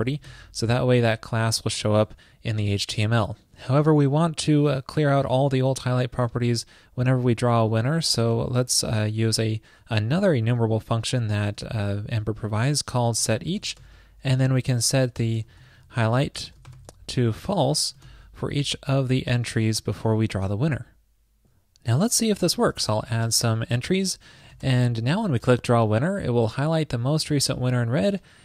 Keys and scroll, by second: 0.9 alt+shift+Left, 18.8 super+Left, 19.7 shift+super+Right, 20.7 super+s.